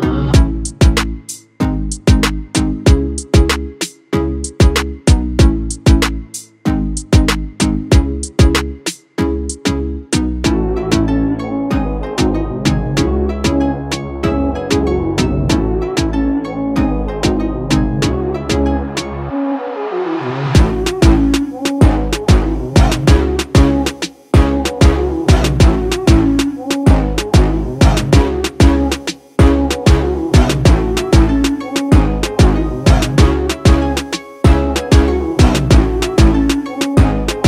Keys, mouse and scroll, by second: 4.7-5.3 scroll down 1, 5.5 click, 5.8 space, 6.9 click, 10.0-12.7 typing, 10.1 click, 11.1 alt+scroll down 1, 11.6 click, 12.3 alt+scroll down 1, 13.2-20.8 ctrl+drag, 21.4-25.8 alt+drag, 25.8-32.1 drag, 32.6-34.1 drag, 34.6 ctrl+space, 34.8 ctrl+click, 35.2 ctrl+space, 35.5 click, 35.8 space, 36.4 click.